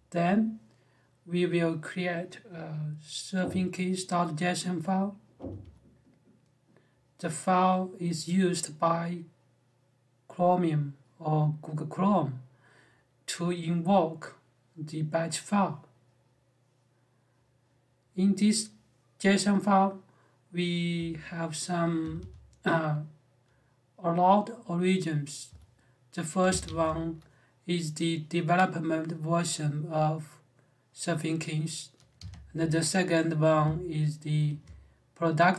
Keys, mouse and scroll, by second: 5.1 j, 5.4 j, 20.7 j, 21.8 b, 21.9 b, 25.2 j, 26.4 shift+v, 31.9 Escape, 32.3 j.